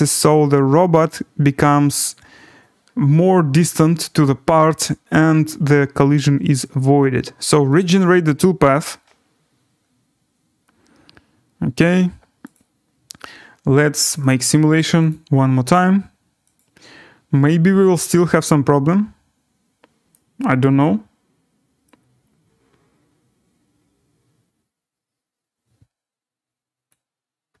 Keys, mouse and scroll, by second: 3.3 Up, 3.3 scroll, 3.5 scroll up 4, 4.4-6.1 scroll, 6.1-7.1 scroll, 7.8 click, 9.7-12.5 scroll, 12.5 click, 14.3 click, 15.1 click, 16.6 click, 17.8 click, 18.6 middle click, 18.7 scroll, 19.3 scroll down 7, 20.6 right click, 26.9 click.